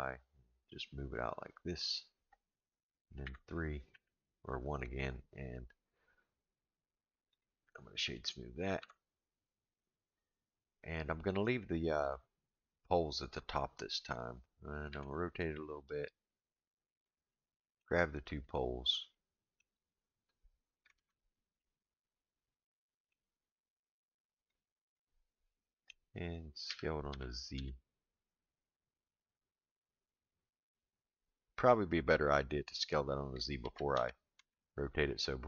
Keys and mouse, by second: 3.2 KP_3, 3.9 KP_1, 7.3-8.2 right drag, 8.8 Tab, 14.9 r, 17.3 middle click, 18.5 click, 19.1 middle click, 20.9 alt+z, 21.6-23.1 middle drag, 23.9 click, 25.0 middle click, 26.7 s, 33.6 ctrl+z, 34.1 ctrl+z, 34.4 ctrl+z.